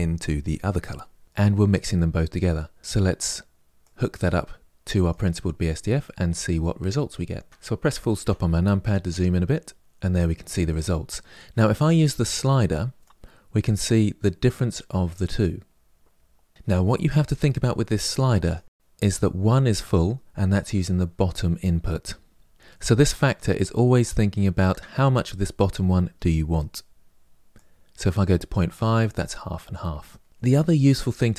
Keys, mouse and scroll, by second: 4.9 click, 7.5 shift+middle click, 8.0 KP_Decimal, 9.0-9.7 scroll up 2, 9.7-13.0 middle drag, 13.0-15.8 drag, 19.1-31.3 drag.